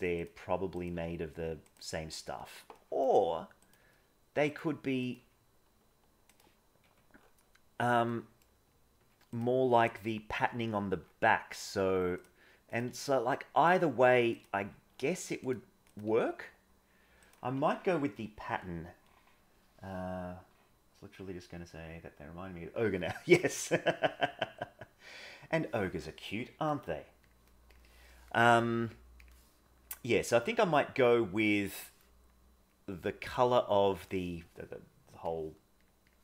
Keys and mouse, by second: 0.7 click, 0.9 g, 2.8 middle click, 3.6 click, 4.9 click, 6.8 Tab, 6.8 g, 8.0 middle click, 8.9 Tab, 10.0 g, 12.8 g, 14.3 click, 14.5 g, 15.8 click, 17.5 Tab, 23.8-25.1 middle drag, 30.3-31.7 drag, 32.6 click.